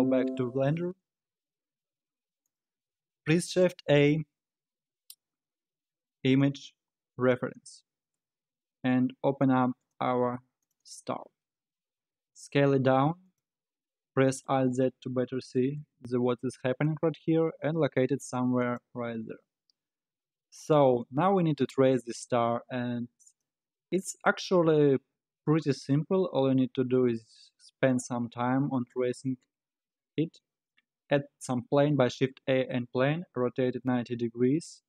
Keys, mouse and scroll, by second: 3.1 shift+a, 11.6-12.3 scroll up 4, 12.3 s, 13.8 scroll down 7, 14.5 alt+z, 15.0-15.8 scroll down 5, 15.8 g, 19.1-19.7 scroll up 2, 19.7-22.6 scroll down 1, 23.3 click, 25.1 shift+a, 33.2 r.